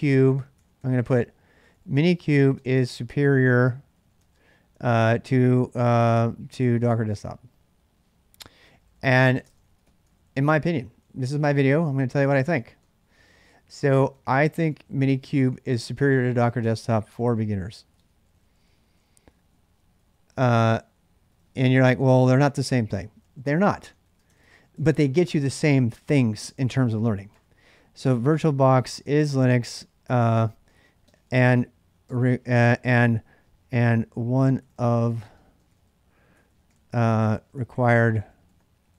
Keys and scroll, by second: 0.0-5.1 typing, 6.4-7.2 typing, 8.2-25.2 typing, 26.2 ctrl+[, 26.3-38.9 typing.